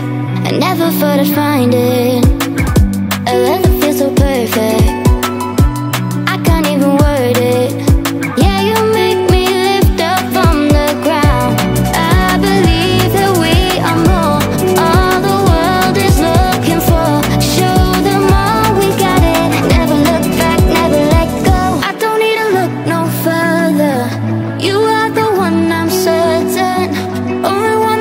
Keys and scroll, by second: 11.2-16.7 typing, 27.6-28.0 typing.